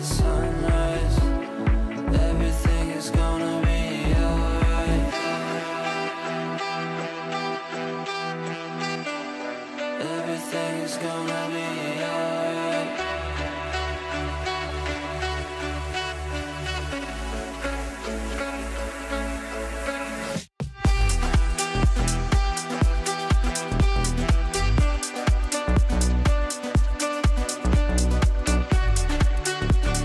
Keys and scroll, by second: 14.1 Delete, 19.6 ctrl+g, 20.9 r.